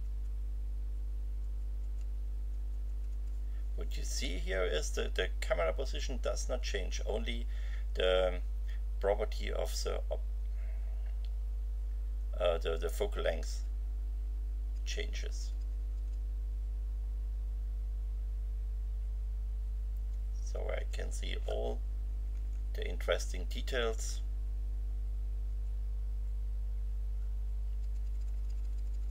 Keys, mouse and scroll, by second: 0.0 F9, 1.4 F9, 2.5 F9, 13.5 F9, 14.7 F10, 22.1 BackSpace, 25.5 F9, 27.8 F10.